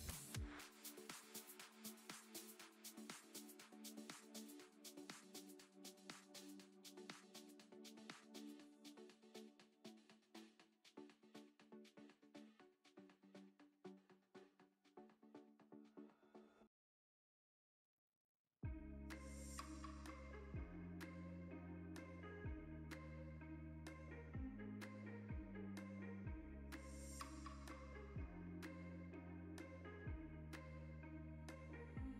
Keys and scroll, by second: 1.9 Tab, 3.2 ctrl+r, 6.8 s, 7.0 z, 18.3 3, 20.0 0, 20.1 i, 23.5 Tab.